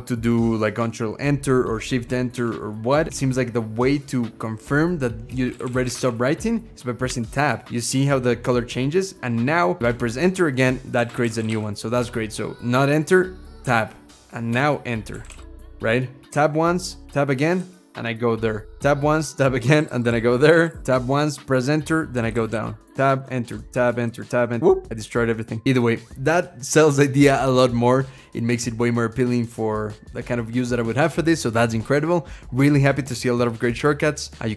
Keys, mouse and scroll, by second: 0.0-0.1 typing, 0.3 ctrl+Return, 1.5 shift+Return, 2.1 BackSpace, 3.0 BackSpace, 5.1-6.1 typing, 6.9 Tab, 9.8 Return, 10.6-12.6 typing, 13.4 Tab, 14.3 Return, 14.7-15.8 typing, 16.1 Tab, 16.9 Tab, 17.1-25.1 typing, 18.6 Tab, 19.1 Tab, 21.3 Return, 23.5 Tab.